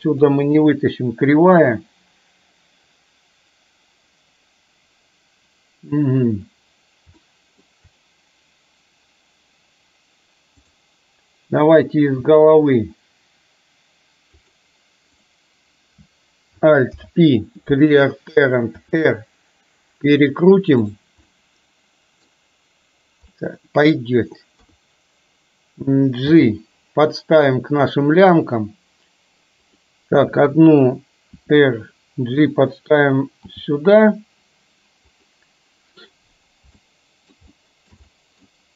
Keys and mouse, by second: 0.0 Delete, 7.3 shift+middle click, 12.3 e, 16.9 alt+p, 18.9 r, 21.4-22.4 middle drag, 23.4 middle click, 24.6 KP_3, 26.3 g, 31.4 r, 33.5 g, 36.8 middle click, 37.6 shift+middle click, 38.3 middle click.